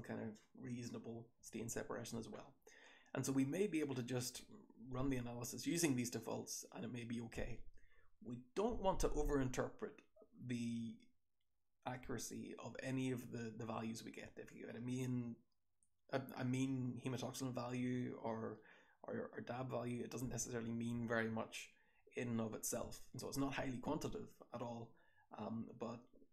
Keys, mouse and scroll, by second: 0.9-2.2 scroll up 1, 2.2-3.6 scroll up 1, 3.6-4.9 scroll up 1, 4.9-6.2 scroll up 1, 6.2-7.6 scroll up 1, 7.6-8.9 scroll up 1, 8.9-10.2 scroll up 1, 10.2-11.6 scroll up 1, 11.6-12.9 scroll up 1, 12.9-14.2 scroll up 1, 14.2-15.6 scroll up 1, 15.6-19.6 scroll up 1, 19.6-20.9 scroll up 1, 20.9-22.2 scroll up 1, 22.2-23.6 scroll up 1, 23.6-24.9 scroll up 1, 24.9-26.3 scroll up 1.